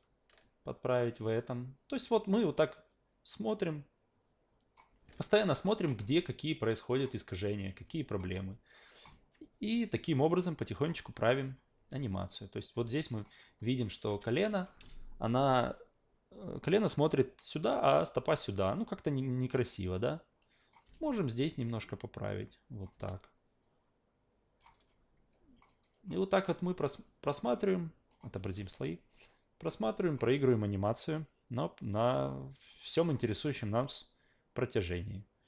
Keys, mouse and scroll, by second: 0.9-4.8 drag, 5.1-5.7 alt+drag, 5.8 alt+middle click, 6.2-7.0 alt+drag, 7.8-8.2 alt+drag, 9.8-10.8 drag, 11.1 alt+click, 12.2 click, 12.9 alt+right click, 13.3 alt+middle drag, 13.6 alt+click, 14.1 q, 19.2-20.7 drag, 20.8 w, 21.6-22.8 drag, 22.9 s, 23.6-24.6 drag, 24.9-25.5 alt+drag, 25.7 alt+right drag, 25.9 alt+click, 26.9 click, 28.1 click, 28.4 a, 29.3-29.6 drag, 29.9 alt+click, 31.2-31.9 drag, 32.1-32.6 alt+drag, 32.7 alt+right click, 33.0 alt+click, 34.0-35.4 drag.